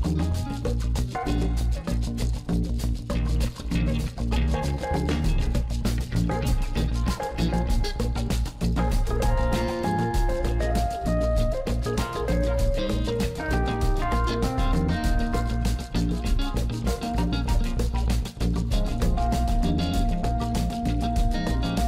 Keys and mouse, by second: 3.2 click, 14.3 click, 17.5 click, 19.0 click.